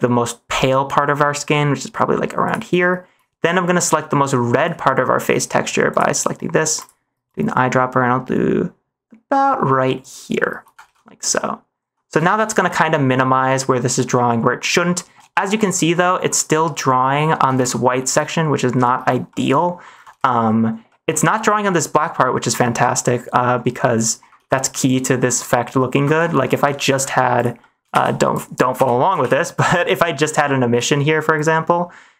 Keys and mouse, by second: 3.4 middle click, 4.8 middle click, 10.8 ctrl+s, 11.3 middle click, 12.2 middle click, 12.6-13.7 middle drag, 14.0 middle click, 14.6 middle drag, 15.2 shift+middle click, 15.9 middle click, 16.9 middle click, 17.5 ctrl+s, 19.2 middle click, 20.1 ctrl+s, 20.8 click, 21.9-22.8 middle drag, 23.5 middle click, 24.4 ctrl+s, 26.1 ctrl+s, 26.7 middle click, 27.3 click, 27.6 middle click, 27.8 shift+a, 29.1 m.